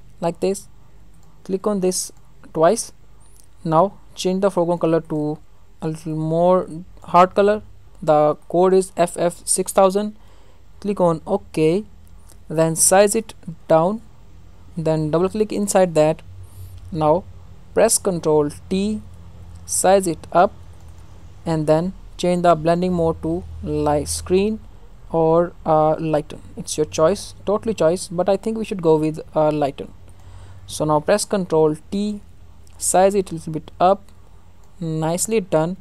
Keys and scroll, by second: 18.5 ctrl+t, 31.8 ctrl+t.